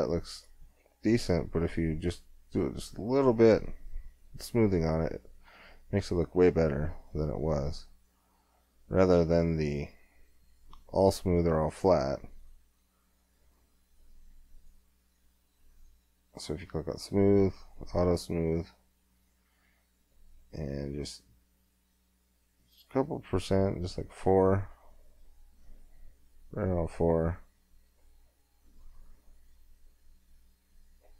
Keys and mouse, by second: 4.6-5.6 middle drag, 5.6 middle click, 6.1 middle click, 6.7-9.6 middle drag, 9.6-20.1 drag.